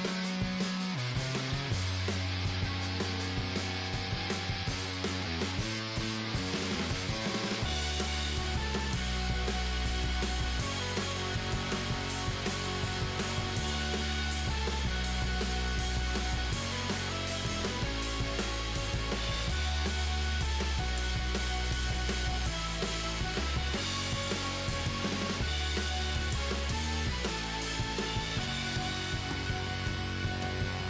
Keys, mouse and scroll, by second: 1.4-3.3 right drag, 2.1 g, 3.4 g, 4.3-6.7 right drag, 4.5 g, 6.1 g, 7.9 g, 8.6 right click, 9.3-11.1 right drag, 9.6 g, 11.1 middle click, 11.6 right click, 11.8 click, 12.1 middle click, 12.1-14.5 right drag, 13.0-14.2 drag, 14.2 middle click, 14.2 g, 15.6-17.9 right drag, 15.7 g, 16.6-17.9 middle drag, 17.9 g, 19.0 middle click, 20.0 g, 20.9 click, 21.3 middle click, 23.2 g, 25.3 Tab, 29.4 Tab, 30.0-30.8 right drag, 30.6 g.